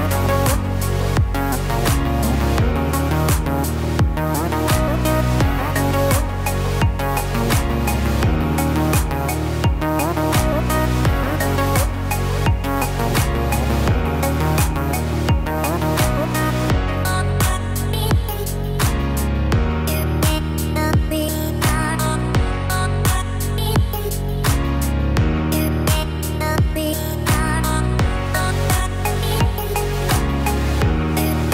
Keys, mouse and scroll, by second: 0.6 Tab, 2.9 ctrl+r, 8.4 ctrl+r, 12.3 ctrl+r, 19.1 ctrl+r, 23.9 middle click, 26.9 Tab, 27.4 click, 27.8-28.3 scroll down 3, 28.1 middle click, 29.6 right click, 31.1 click.